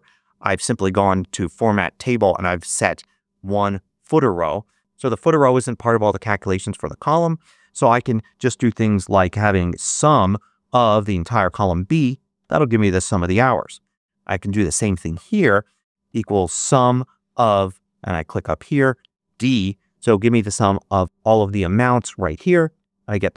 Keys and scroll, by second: 8.6-10.3 typing, 12.3 shift+0, 12.7 shift+Return, 13.4 Return, 15.7-17.3 typing, 19.4 shift+0, 21.0 Return.